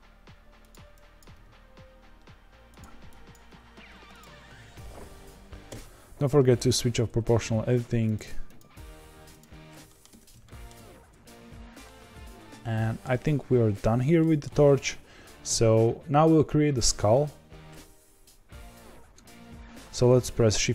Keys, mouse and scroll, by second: 1.2 click, 1.3 g, 3.3 click, 3.4 g, 5.6 o, 8.0-9.8 drag, 9.8 middle click, 10.1 Tab, 10.4 middle click, 10.7 z, 11.8-13.7 middle drag, 13.7-14.1 scroll down 1, 14.1-18.4 shift+middle drag, 18.4-19.7 scroll down 3.